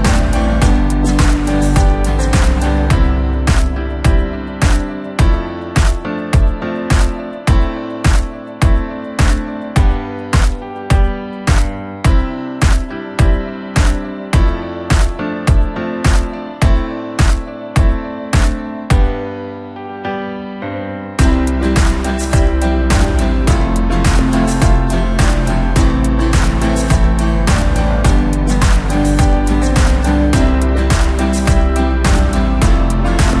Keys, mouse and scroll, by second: 2.1 shift+b, 5.0 g, 9.5 click, 10.0-10.7 scroll down 4, 10.7-11.3 scroll up 1, 11.3 3, 12.1 e, 14.6-15.9 scroll down 2, 15.9 g, 18.0-18.8 scroll down 6, 19.1 e, 22.4-22.7 scroll down 2, 22.7 e, 25.7 middle click, 26.1-26.9 scroll up 2, 26.9 click, 27.4 middle click, 28.1-28.8 scroll up 1, 28.8 shift+click, 29.4-31.7 right drag, 31.7-33.4 middle drag.